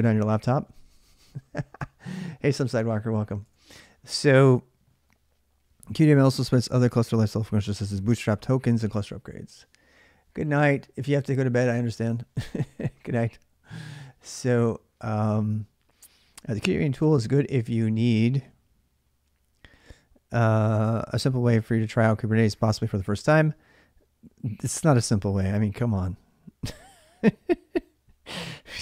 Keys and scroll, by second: 3.3 alt+Tab.